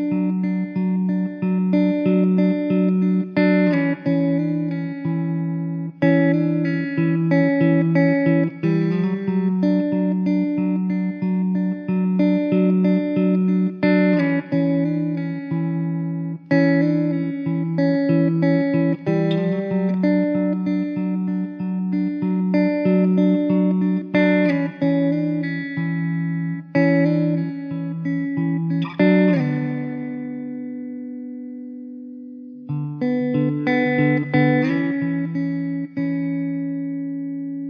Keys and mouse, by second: 29.9 middle click, 33.0 alt+w, 33.6 alt+middle click, 34.8 e.